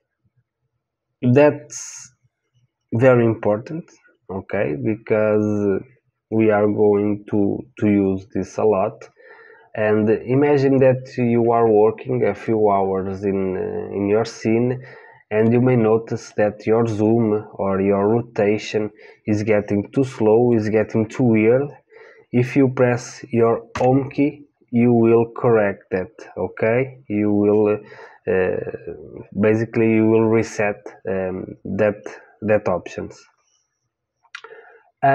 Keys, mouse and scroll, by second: 9.2-14.7 middle drag, 16.3-18.3 middle drag, 20.5-23.7 middle drag, 23.7 Home.